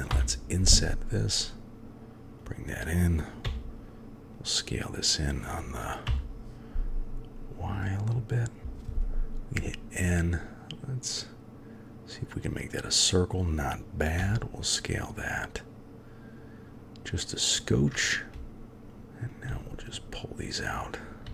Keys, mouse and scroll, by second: 0.1 i, 3.4 s, 8.6 n, 11.0 click, 14.2 s, 18.3 1, 18.3 g, 19.2 click, 19.5-21.3 g.